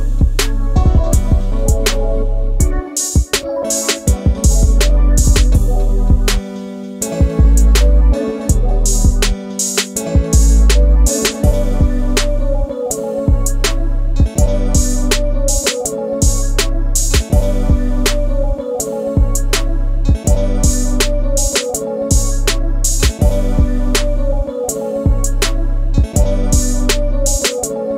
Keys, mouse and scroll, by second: 3.5 click, 3.7 scroll down 1, 4.0-4.4 middle drag, 4.4-4.8 scroll down 5, 4.8 click, 5.3 middle click, 5.6-6.2 scroll up 3, 6.2 scroll down 1, 6.4 click, 7.0-8.5 shift+middle drag, 8.5 click, 8.9 middle click, 9.3-10.7 scroll up 2, 10.7 KP_Decimal, 11.3-11.9 scroll down 4, 11.9-14.9 scroll up 1, 14.9 click, 19.3 scroll down 3, 19.7 click, 21.2 click, 21.6 KP_7, 22.1-22.8 scroll down 2, 22.8 g, 26.0 ctrl+z, 26.6 g.